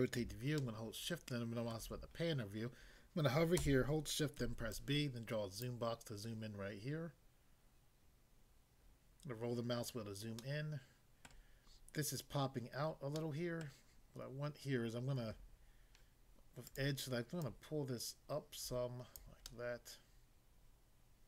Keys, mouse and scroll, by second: 0.6 shift+middle click, 4.4 b, 4.8 click, 5.7 click, 9.2 scroll up 1, 9.7 scroll up 1, 10.4 middle click, 11.2 middle click, 13.1 middle click, 13.6 middle click, 16.6 click, 17.4 click, 19.2 click, 19.4 middle click.